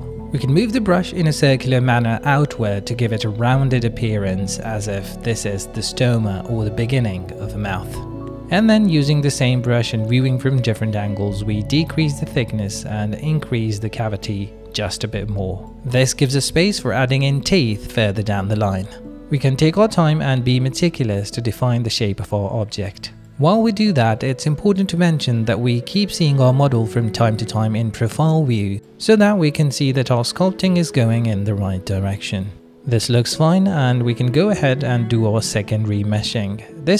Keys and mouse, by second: 0.1 click, 1.0 shift+click, 1.7 KP_1, 2.6 f, 2.9 f, 3.5 f, 4.5 ctrl+click, 7.5 middle click, 8.7 ctrl+click, 9.5 middle click, 10.5 click, 11.7 click, 12.4 click, 12.9 ctrl+click, 14.7 click, 14.9 middle click, 15.6 click, 16.8 click, 18.0 click, 18.0 middle click, 18.0 right click, 19.3 click, 19.3 middle click, 19.3 right click, 19.7 ctrl+click, 20.1 click, 21.0 ctrl+click, 22.1 click, 23.0 middle click, 23.7 middle click, 24.0 ctrl+click, 24.3 middle click, 24.7 ctrl+alt+y, 24.8 middle click, 25.2 middle click, 25.5 ctrl+middle click, 26.0-27.2 middle drag, 27.8 ctrl+middle click, 28.3-29.7 middle drag, 29.9 ctrl+middle click, 30.1-32.2 middle drag, 32.7 middle click, 32.9 shift+middle click, 33.2 middle click, 33.7 r, 35.7 middle click.